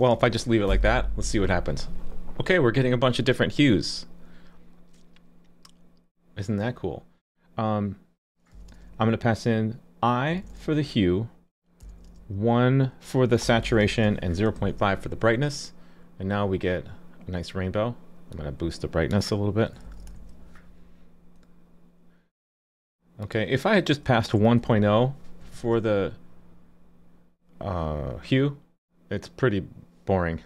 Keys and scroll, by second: 0.2 super+s, 14.6 super+s, 20.1 super+s, 25.5 super+s.